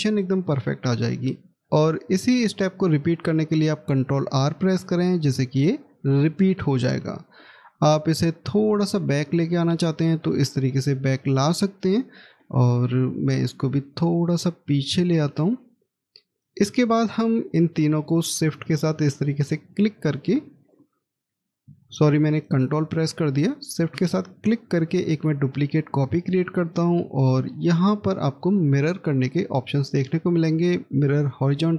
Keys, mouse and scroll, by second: 3.9 ctrl+r, 7.7 scroll up 1, 11.4 scroll down 1, 12.2 middle click, 16.8-18.8 scroll down 1, 19.0 ctrl+click, 22.2 shift+click, 23.4 shift+click, 26.4 shift+right click.